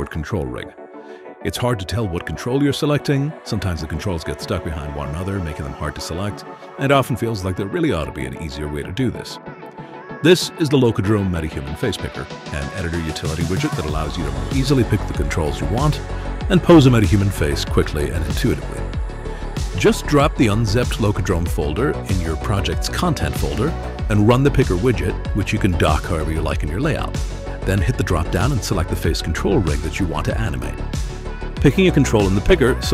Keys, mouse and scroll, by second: 1.2 click, 1.8-2.8 drag, 3.7 click, 4.5-5.7 drag, 7.1 click, 8.0 click, 8.8 click, 9.8 click, 10.8 shift+click, 12.0-14.0 typing, 15.1 click, 15.2-18.1 typing, 19.1 click, 20.8 click, 22.2 right click, 23.8 click, 28.2 click, 28.8 click, 29.3 click, 30.2 click.